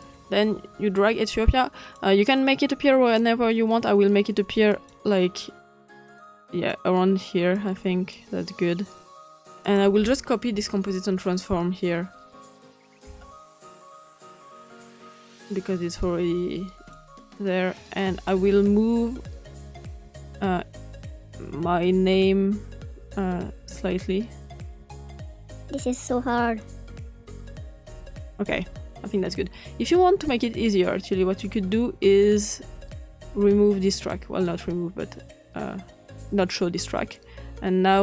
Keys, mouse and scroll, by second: 4.7 click, 5.9 click, 7.5 click, 9.2 click, 9.6 click, 13.4 ctrl+c, 14.3 ctrl+v, 14.9 click, 16.0 click, 17.8 click, 19.5-28.4 drag, 32.6 scroll down 2, 33.9 click.